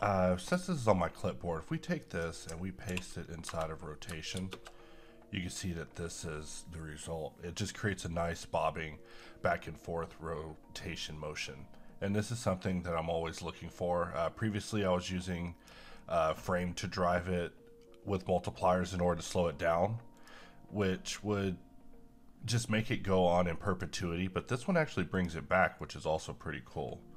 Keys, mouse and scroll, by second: 2.1 click, 2.8 v, 4.4 shift+space, 5.7-7.6 scroll down 2, 13.4-20.1 drag, 23.6 click.